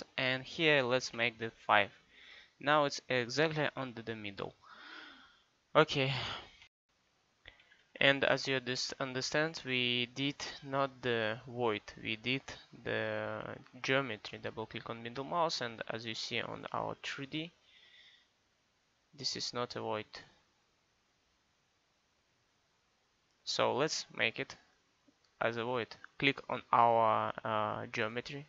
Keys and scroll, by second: 1.2 5, 7.5 Escape.